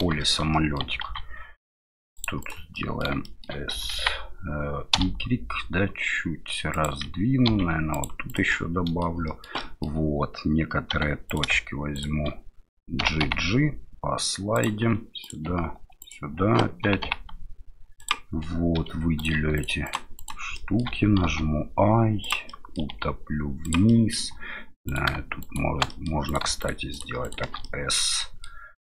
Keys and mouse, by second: 0.3 shift+middle click, 0.7-2.6 ctrl+middle drag, 1.0 ctrl+r, 2.9 middle click, 3.2 shift+middle click, 3.7 s, 7.5 ctrl+r, 8.5 middle click, 9.3 middle click, 9.7 middle click, 10.9 1, 11.3 right click, 11.9 right click, 13.0 g, 15.2 right click, 16.0 shift+right click, 16.8 g, 18.8 3, 19.2 right click, 19.6 shift+right click, 19.8 right click, 20.2 right click, 20.6 middle click, 21.2 i, 22.6 middle click, 22.9 e, 24.0 middle click, 24.9 right click, 25.4 right click, 25.9 middle click, 26.3 right click, 26.6 shift+right click, 26.9 shift+right click, 27.2 shift+right click, 27.6 middle click.